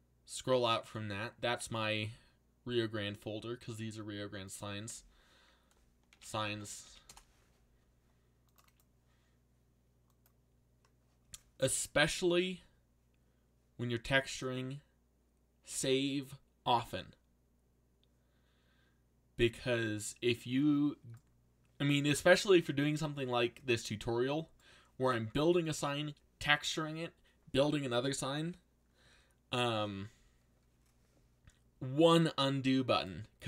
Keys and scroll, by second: 5.8-7.3 typing.